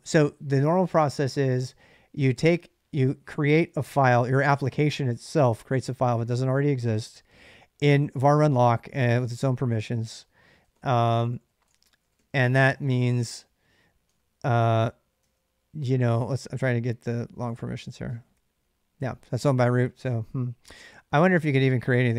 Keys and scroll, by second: 9.2-18.1 typing, 13.8 Tab, 13.8 Return.